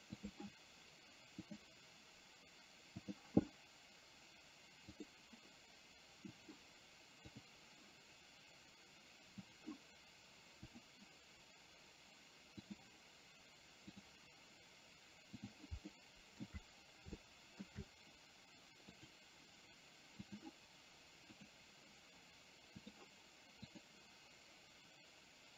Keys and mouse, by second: 0.4 click, 1.5 click, 3.1 click, 10.8 click, 12.8 click, 14.0 click, 15.9 shift+middle click, 17.3 shift+middle click, 20.2 click, 21.5 click, 22.8 click.